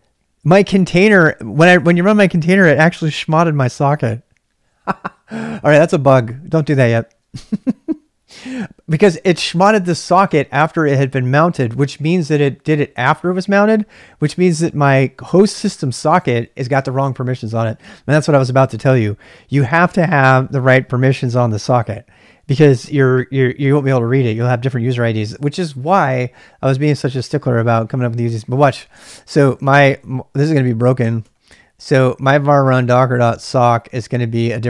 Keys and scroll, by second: 14.4-15.3 typing, 28.3-34.6 typing.